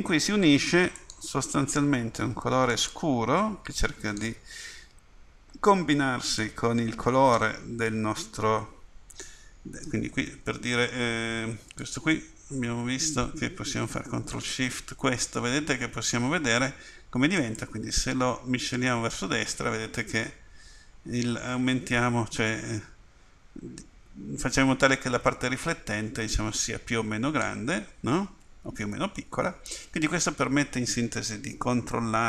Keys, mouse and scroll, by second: 1.0-3.0 drag, 16.0 click.